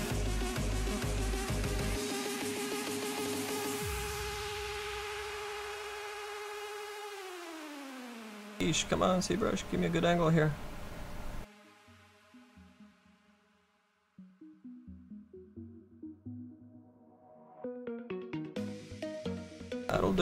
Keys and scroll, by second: 0.3 s, 5.1 s.